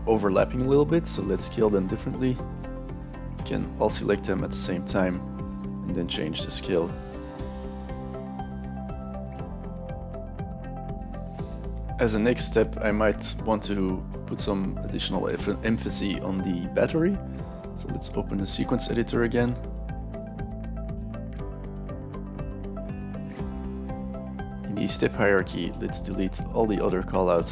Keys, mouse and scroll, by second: 3.2 middle click, 3.9 scroll up 2, 4.5 scroll up 1, 5.4 click, 7.3 alt+click, 8.3 click, 8.4 click, 8.6 click, 9.0 scroll down 1, 9.4 click, 10.1 alt+click, 17.9 click, 19.1 right click, 20.8 click, 21.1 right drag, 21.9 drag, 22.4 a, 23.7 click, 24.7 click, 26.0 click, 26.8 shift+click.